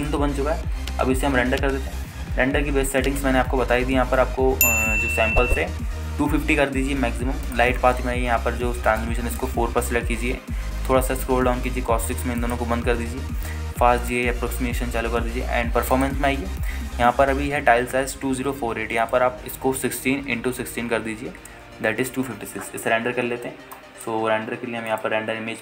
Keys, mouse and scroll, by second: 0.2 scroll up 1, 1.0 alt+shift+middle drag, 1.0 scroll up 2, 1.9 ctrl+z, 4.4 ctrl+space, 5.9-6.4 drag, 6.4-7.4 scroll down 2, 7.8-8.6 scroll down 2, 8.6 click, 8.9-10.1 scroll down 2, 10.1 click, 10.9-11.7 scroll down 2, 12.3-13.1 scroll down 1, 13.3-13.8 drag, 13.9-15.2 scroll down 2, 15.2 click, 16.3-16.6 scroll down 3, 17.1 drag, 17.4-18.1 scroll down 2, 18.1 scroll down 1, 20.2-23.3 drag, 23.4-24.0 scroll up 4.